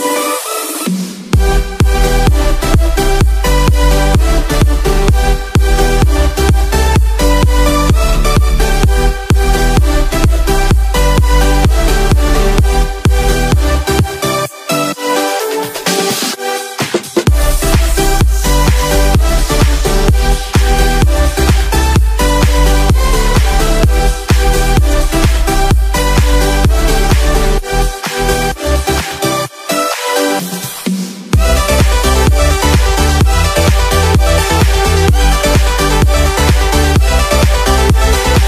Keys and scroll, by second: 1.2 space, 3.0 space, 6.1 space, 6.6 ctrl+=, 8.0 ctrl+z, 17.0 space, 20.9 space, 24.4 space, 26.5 space, 31.7 space, 33.7 ctrl+z, 35.8 ctrl+-, 37.9 space.